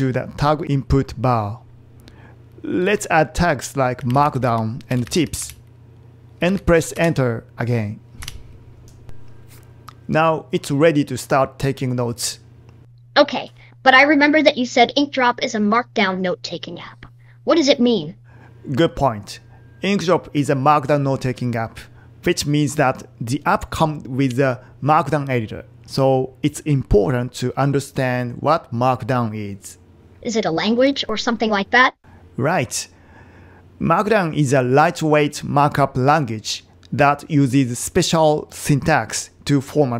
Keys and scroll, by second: 10.2 Return.